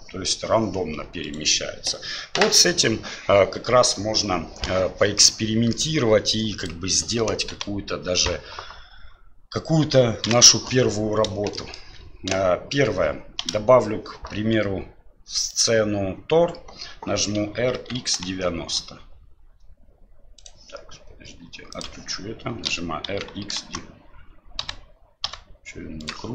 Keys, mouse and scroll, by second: 5.2-5.7 middle drag, 6.4 drag, 7.5 Delete, 10.2 KP_1, 11.5 shift+middle drag, 13.4 shift+a, 17.4 r, 21.7 click, 22.7 r.